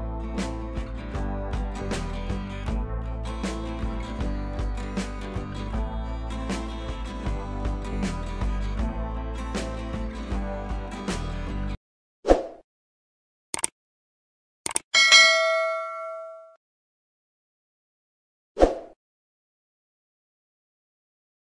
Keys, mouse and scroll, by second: 0.1-0.4 scroll up 1, 0.8 ctrl+scroll down 1, 0.9 ctrl+t, 1.6-2.9 alt+drag, 3.5 space, 3.6 click, 3.8 space, 3.9-4.2 scroll up 1, 4.2-4.9 click, 5.9 scroll down 1.